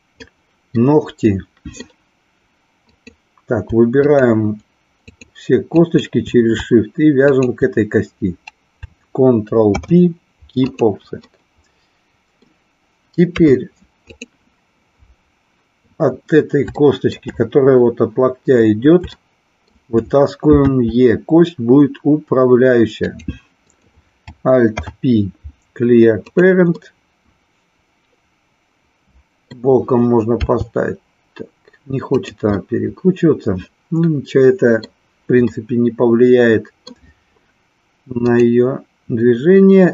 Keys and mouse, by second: 0.8 middle click, 2.8 click, 3.9 shift+click, 5.7 shift+click, 7.2 shift+click, 9.7 ctrl+p, 11.3-12.4 middle drag, 13.3 KP_3, 16.8 shift+middle click, 19.2 shift+middle click, 20.6 e, 23.1 click, 23.5 click, 24.7 alt+p, 26.8-29.5 middle drag, 30.3 r, 32.6-34.9 middle drag, 35.4-36.8 middle drag, 38.3 click.